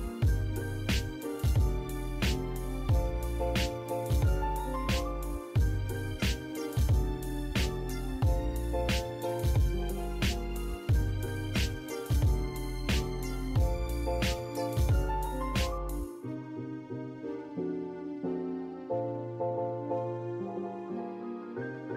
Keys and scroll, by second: 2.6 Escape, 7.6 Escape, 15.5 e, 15.6 space.